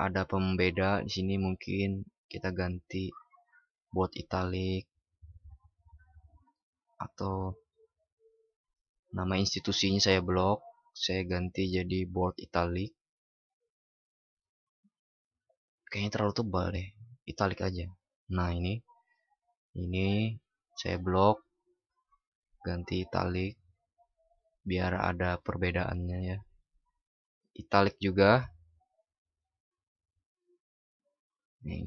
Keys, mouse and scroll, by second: 6.5 ctrl+shift+y.